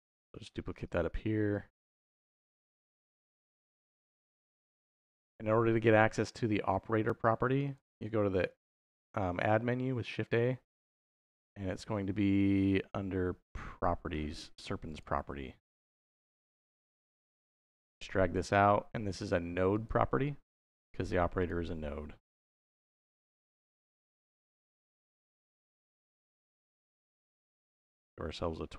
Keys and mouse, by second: 0.0 shift+d, 0.7 click, 1.3-1.8 drag, 2.7-3.4 drag, 4.0 click, 4.7 x, 7.5 click, 8.1 shift+a, 17.2-18.2 drag, 19.6 click, 21.2 click, 22.9-28.7 drag, 28.0 BackSpace.